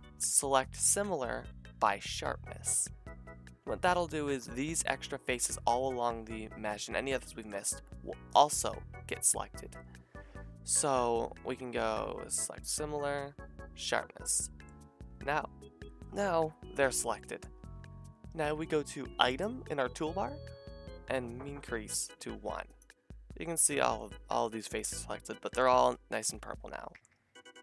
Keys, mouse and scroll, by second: 4.4-5.9 drag, 14.8-19.6 drag, 19.6-22.2 middle drag, 22.2 click, 22.8-27.6 middle drag, 23.3 g, 24.3 g.